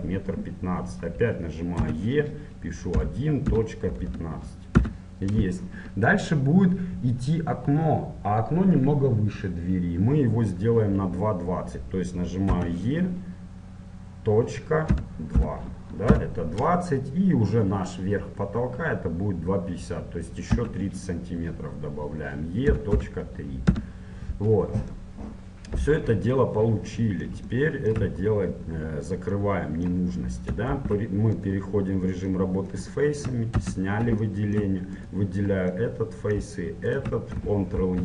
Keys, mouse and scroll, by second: 1.9 e, 10.7-12.5 middle drag, 12.5 e, 20.5 e, 25.1-27.0 middle drag, 27.6-31.5 middle drag, 30.7 ctrl+Tab, 32.4-35.1 middle drag, 33.6 a, 35.1-38.0 right drag, 37.8 ctrl+e.